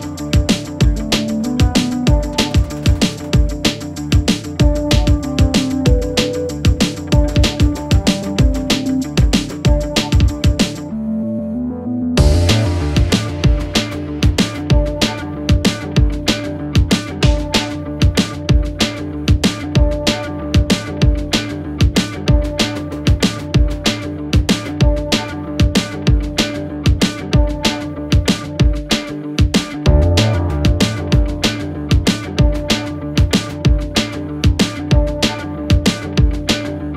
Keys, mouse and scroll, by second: 0.4 ctrl+Return, 2.4 click, 10.6 shift+F5, 12.1 click, 20.6-36.9 alt+drag.